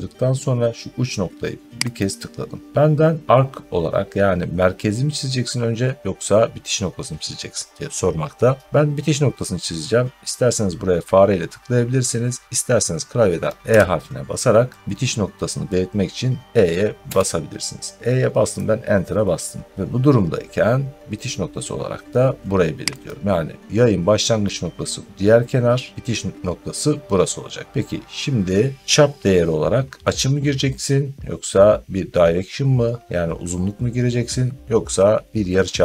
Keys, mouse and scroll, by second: 1.9 click, 2.6 scroll, 13.6 e, 17.0 Return, 22.9 click.